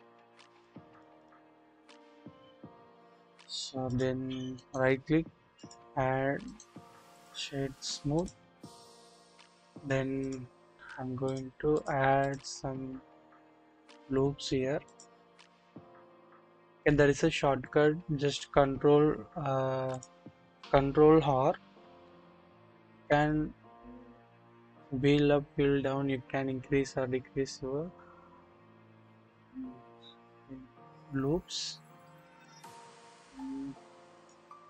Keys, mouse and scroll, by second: 0.6 double click, 2.1-3.5 drag, 4.6 click, 4.6 right click, 6.4-7.3 drag, 8.1 click, 8.8-9.9 drag, 11.2 click, 11.8-12.3 drag, 13.9 click, 14.8 click, 17.4 ctrl+z, 19.9 click, 21.9 ctrl+r, 22.9-23.6 scroll down 1, 23.6-24.9 scroll up 1, 25.5-26.0 scroll up 1, 26.0-27.8 scroll down 1, 27.8-29.3 scroll up 2, 29.3-33.1 scroll up 1.